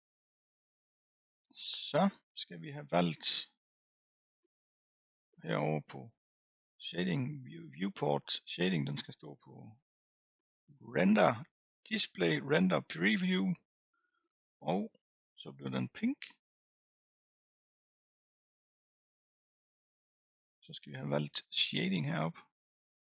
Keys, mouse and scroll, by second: 9.5 click.